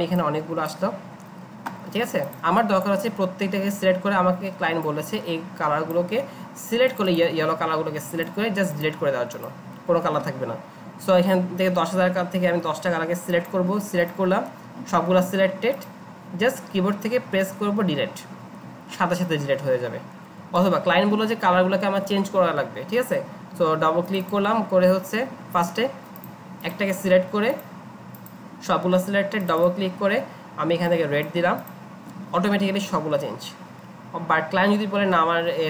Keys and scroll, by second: 18.2 Delete, 20.6 ctrl+z.